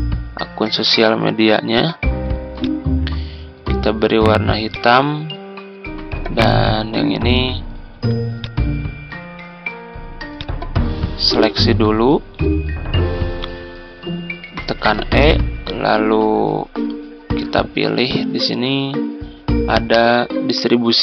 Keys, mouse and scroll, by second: 0.7 Delete, 1.7 click, 2.0 Delete, 2.5-3.8 drag, 6.8-7.8 drag, 7.9 z, 8.3-12.8 drag, 14.7 e, 15.2-21.0 drag.